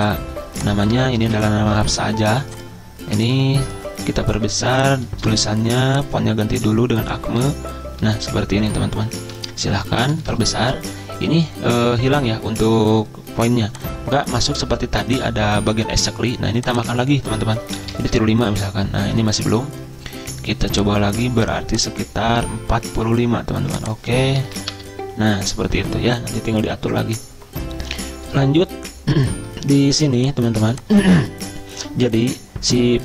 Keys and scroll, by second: 1.1 Return, 1.2 ctrl+v, 1.8 ctrl+a, 7.5 ctrl+], 7.8 ctrl+], 7.9 ctrl+], 17.6-18.4 typing, 24.2-25.0 typing.